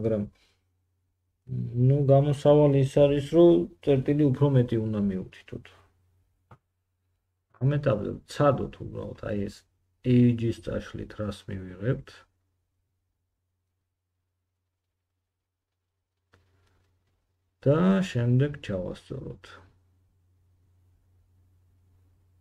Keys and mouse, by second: 4.5 3, 5.3 middle click, 9.2 middle click, 11.1 2, 13.9 x.